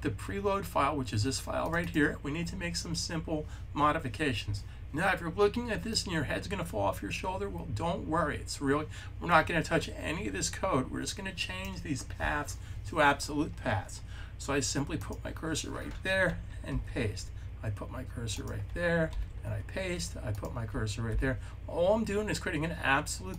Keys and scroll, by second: 16.5 super+v, 19.0 super+v, 20.9 super+v.